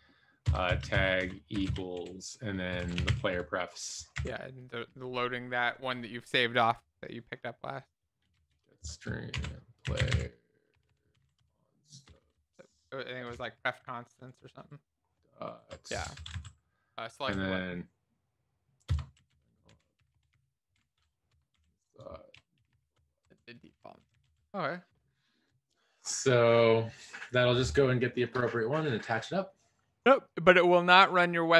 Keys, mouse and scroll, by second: 0.4 Return, 0.7-1.6 typing, 2.8-3.5 typing, 4.7-6.5 typing, 7.7 shift+Return, 9.3-12.1 typing, 13.1-14.3 typing, 15.8 Up, 15.9 Down, 16.2 Up, 17.0 Up, 17.6 Down, 18.9 Return, 19.1-21.2 typing, 21.3 Return, 22.3-23.2 typing, 23.2 Right, 23.8 alt+shift+f, 24.2 ctrl+s, 24.2 Down.